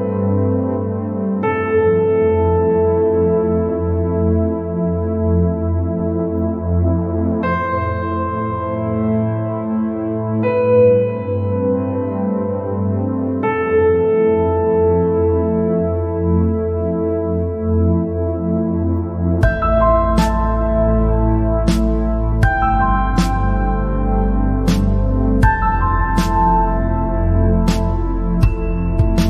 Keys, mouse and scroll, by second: 5.3 click, 5.8 scroll down 2, 5.9 middle click, 6.6-7.0 scroll up 3, 7.0-8.9 middle drag, 8.9-9.7 scroll down 3, 9.7 middle click, 10.4 scroll up 2, 12.3 scroll down 2, 12.8 scroll up 2, 13.4 scroll down 1, 13.5-16.5 middle drag, 16.7 scroll up 1, 17.3 scroll down 1, 17.6-19.5 middle drag, 19.5 scroll down 3, 19.8 middle click, 20.4-20.9 scroll up 3, 20.9-22.2 middle drag, 22.2-22.8 scroll down 2, 22.8-23.1 scroll up 2, 23.1-26.3 middle drag, 26.9-28.7 middle drag, 28.7 scroll down 2, 28.9 middle click.